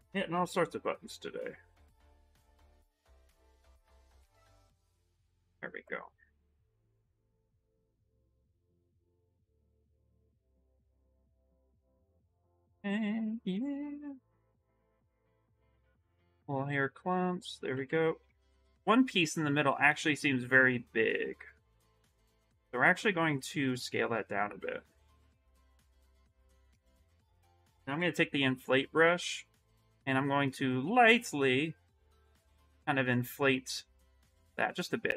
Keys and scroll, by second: 0.1 s, 16.4 w, 17.5 q, 18.0 w, 19.7 ctrl+z, 22.6 q, 27.1-29.1 typing, 28.8 ctrl+z.